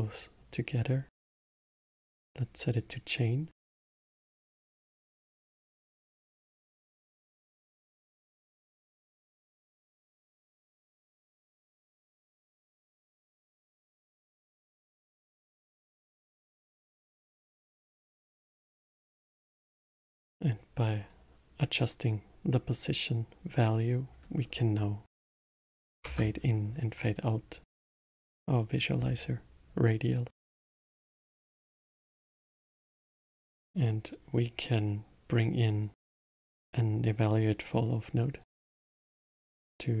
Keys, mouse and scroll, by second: 1.1-4.1 drag, 4.6 middle click, 5.3-6.8 drag, 8.1 click, 9.7 middle click, 10.3 drag, 11.2-13.0 drag, 18.1-21.2 drag, 22.7-25.8 drag, 27.7-30.7 middle drag, 31.1 shift+a, 39.2-40.0 drag.